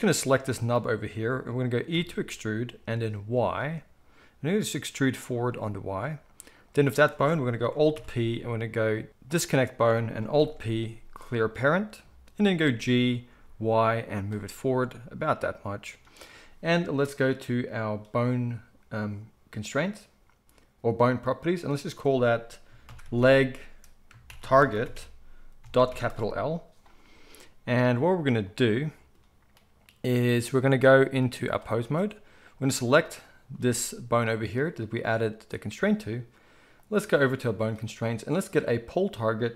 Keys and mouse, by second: 1.9 e, 6.5 click, 6.6-21.6 middle drag, 7.9 alt+p, 10.4 alt+p, 12.6 g, 21.6-32.5 drag, 32.5-39.5 middle drag.